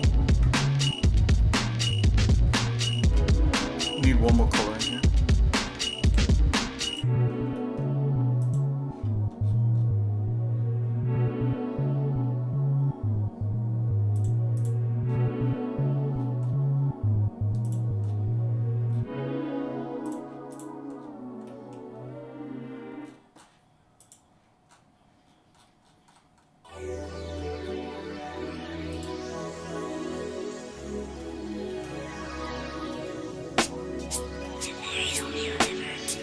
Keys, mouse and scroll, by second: 0.3 Tab, 0.8-1.3 scroll down 4, 1.4 middle click, 1.9 shift+middle click, 2.5-2.8 scroll up 2, 3.0 shift+middle click, 3.8 shift+middle click, 4.5 middle click, 5.1 scroll up 2, 5.7 Tab, 6.1 click, 7.2 click, 7.6 middle click, 7.8 scroll up 1, 8.4 click, 9.4-10.0 scroll down 3, 14.2 click, 15.1 scroll down 1, 15.1 scroll up 1, 15.4 scroll down 1, 16.4-16.8 scroll down 2, 17.7 click, 18.1 scroll down 1, 19.1 scroll down 1, 20.1 click, 20.6 click, 21.0 scroll down 2, 21.5 middle click, 23.0-23.6 scroll up 4, 24.0 click, 24.7 scroll up 2, 25.3-25.7 scroll down 2, 25.6 scroll up 1, 25.9-26.5 scroll down 4, 27.0-27.6 scroll up 4, 27.7 scroll down 1, 29.0 click, 29.5 scroll down 1, 29.7 scroll up 1, 29.8-30.9 scroll down 6, 31.3 shift+middle click, 32.0 middle click, 32.5 shift+middle click, 33.1 middle click, 33.6 shift+middle click, 34.6 middle click, 35.3 shift+middle click.